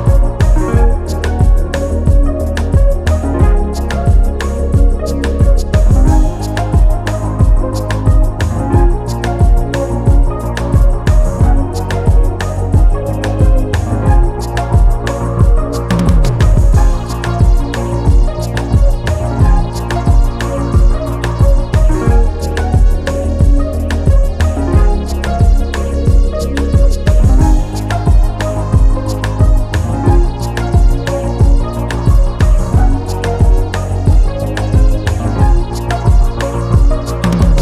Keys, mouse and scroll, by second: 0.9 Down, 5.6 click, 6.4 click, 7.3-7.8 ctrl+scroll up 2, 7.9 ctrl+click, 9.1 click, 10.4 Delete, 11.8 ctrl+y, 16.2 Delete, 17.7-18.4 ctrl+scroll down 3, 20.4 click, 21.1 click, 22.6 ctrl+d, 24.5 ctrl+d, 25.2-26.8 ctrl+drag, 27.8 Left, 28.1 Down, 28.3 Left, 28.4 Down, 28.6 Left, 28.7 Down, 28.7 Left, 28.8 Down, 28.9 Left, 29.0 Down, 29.1 Left, 29.1 Down, 31.2 shift+click, 32.2 ctrl+shift+KP_Subtract, 34.8 click, 36.1 click, 37.1 KP_2, 37.2 KP_0, 37.4 KP_Enter.